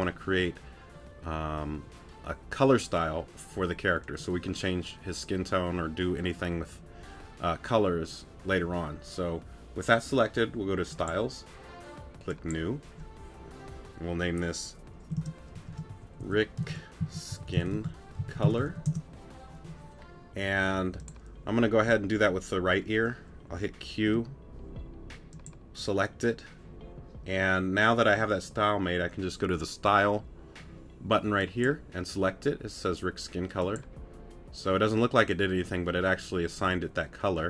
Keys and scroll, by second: 24.1 p.